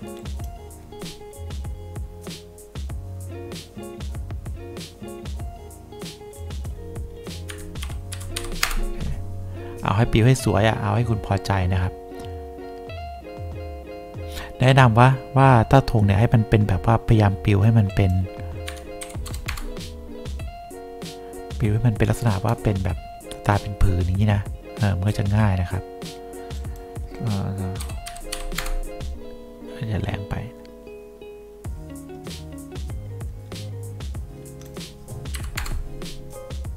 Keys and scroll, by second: 2.0 Return, 7.6 KP_Subtract, 7.9 4, 8.5 5, 8.8 Return, 18.8 KP_Subtract, 19.1 1, 19.4 0, 19.6 Return, 28.0 2, 28.5 5, 28.7 Return, 35.5 3, 35.7 Return.